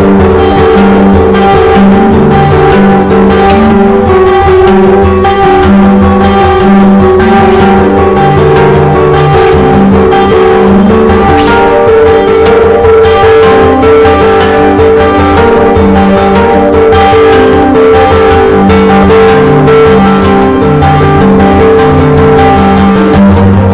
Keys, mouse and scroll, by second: 7.3 ctrl+d, 7.9-9.0 drag, 9.8 shift+click, 11.0-12.1 drag, 12.2 shift+click, 13.2 click, 15.5 shift+click, 16.2 shift+click, 17.1 click, 19.9 Delete, 20.2 click, 20.5 Delete, 21.2 Delete, 21.9 Delete, 22.5 click, 22.8 Delete, 23.2 Delete, 23.6 click.